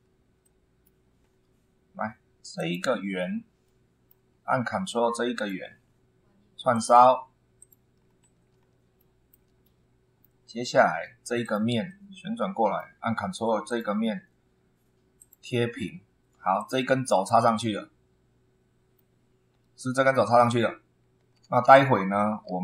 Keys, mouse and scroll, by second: 0.4 middle click, 1.2 scroll up 2, 2.6 click, 3.1 scroll down 1, 3.6 middle click, 4.3 scroll up 1, 5.3 ctrl+click, 6.7 click, 7.6 click, 8.0-8.4 scroll down 1, 8.6 scroll down 2, 9.0 shift+middle click, 9.6 shift+middle click, 10.4-10.8 scroll up 2, 11.4 click, 11.8-13.0 middle drag, 13.6 ctrl+click, 15.2 click, 16.6 click, 17.0-17.4 scroll down 2, 17.4-19.1 middle drag, 19.2-19.7 scroll up 4, 21.4 ctrl+1.